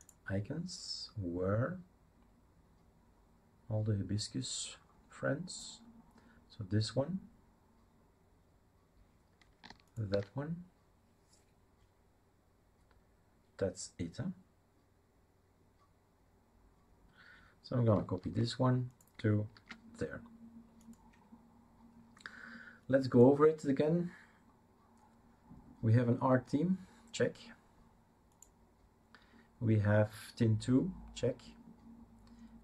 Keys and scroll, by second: 18.2 ctrl+c, 19.5 ctrl+v.